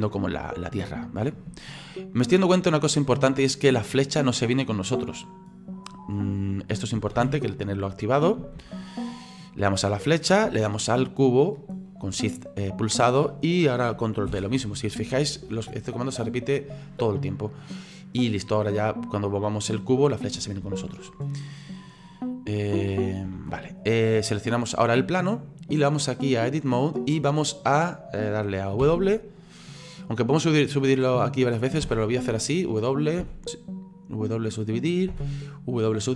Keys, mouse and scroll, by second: 7.2 ctrl+z, 8.6 ctrl+z, 9.1-10.1 middle drag, 10.1 right click, 11.5 shift+right click, 14.3 ctrl+p, 17.7 right click, 18.6 right click, 19.1 right click, 19.7-20.7 drag, 20.7 ctrl+z, 22.7-23.4 drag, 23.4 ctrl+z, 23.9-24.6 middle drag, 24.6 right click, 25.1-26.3 middle drag, 26.3 click, 27.1-28.8 scroll down 6, 28.8 w, 31.8 w, 33.2 w, 35.1 w.